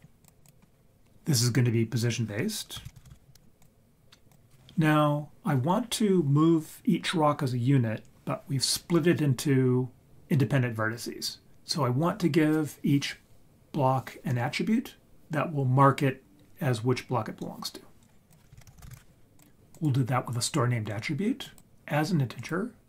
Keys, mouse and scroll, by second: 1.3 click, 2.8 shift+a, 18.3 click, 18.6 shift+a, 18.8 s, 21.4-22.5 drag.